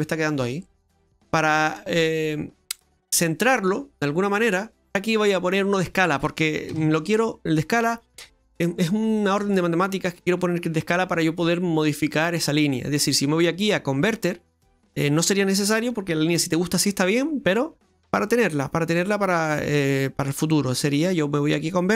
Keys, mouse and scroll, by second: 0.6 middle click, 1.9 middle click, 1.9 click, 3.2 middle click, 4.9-5.7 scroll up 3, 6.7 shift+a.